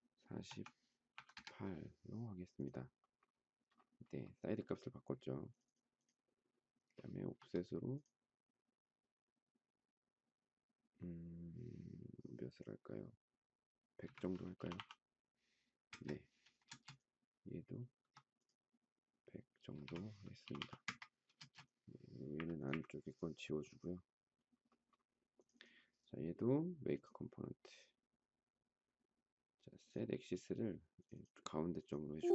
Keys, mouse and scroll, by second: 0.4 4, 1.0 8, 1.2 Return, 13.9-15.3 typing, 15.9 Return, 16.6 space, 18.0 f, 19.5-21.4 typing, 22.3 Delete, 22.7 Delete.